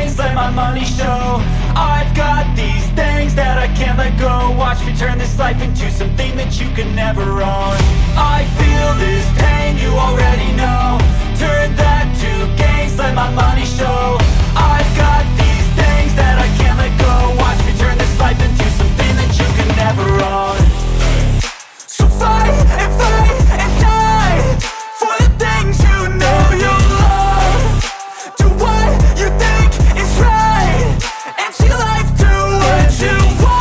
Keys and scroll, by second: 0.0-6.4 typing, 11.1-14.5 typing, 12.8 KP_Add, 14.5 Return, 15.1 ctrl+s, 22.2 ctrl+c, 24.4 Return, 27.6 Right, 28.0 BackSpace, 28.7 shift+., 29.2 =, 30.1 Right, 30.4 Delete, 30.7-33.4 typing.